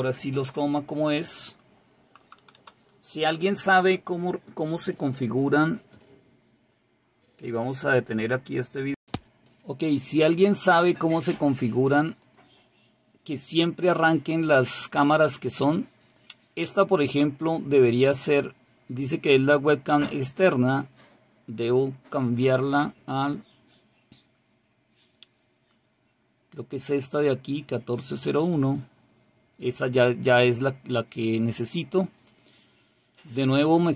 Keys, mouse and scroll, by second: 12.1 click, 12.7 click, 16.0 click, 22.1 click, 22.8 click, 25.0 click, 25.5 click, 26.8 click, 28.4 click, 33.1 click.